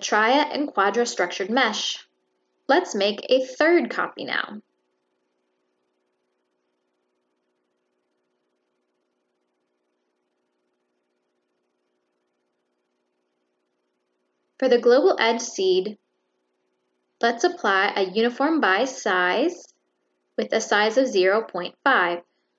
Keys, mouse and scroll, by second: 0.4-1.0 drag, 2.6 click, 3.7 middle click, 3.7 scroll up 1, 6.4 click, 7.1 click, 8.0 middle click, 8.8 click, 10.4 click, 11.9 middle click, 12.5-14.0 middle drag, 14.8 click, 16.7 click, 17.4 click, 19.7 click, 20.6 click, 21.8 drag, 22.3 click.